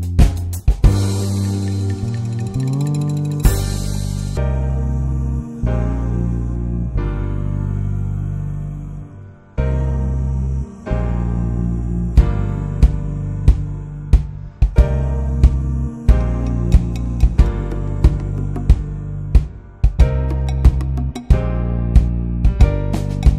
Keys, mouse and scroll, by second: 0.1 shift+middle click, 0.9 click, 1.8 scroll down 2, 2.0 middle click, 2.1-3.1 scroll up 5, 2.5 middle click, 3.1-6.5 drag, 7.0-7.5 scroll down 4, 7.5 middle click, 7.6-8.5 scroll up 6, 8.5 click, 9.3 scroll down 2, 9.4 middle drag, 9.6 click, 9.9-10.5 middle drag, 10.5 scroll up 1, 10.7 ctrl+s, 11.2 click, 11.4 shift+middle click, 11.8 ctrl+s, 12.5 click, 13.4 scroll down 1, 13.6 click, 13.9 middle click, 14.2 scroll up 2, 14.4 scroll down 2, 16.4 click, 16.7 middle click, 17.5-18.0 scroll up 1, 20.0-21.7 drag, 21.9 scroll down 1, 22.0 alt+shift+middle click, 22.8-23.3 drag.